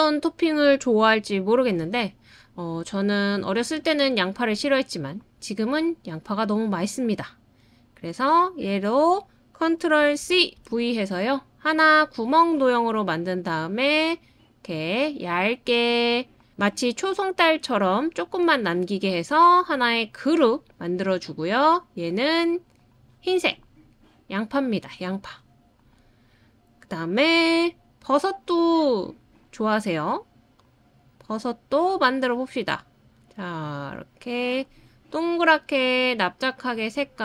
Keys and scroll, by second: 10.2 super+c, 10.5 super+v.